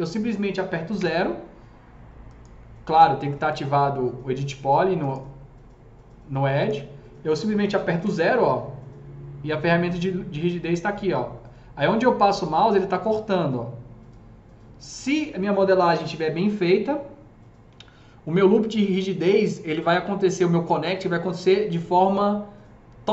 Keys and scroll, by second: 0.9 KP_0, 7.9 KP_0.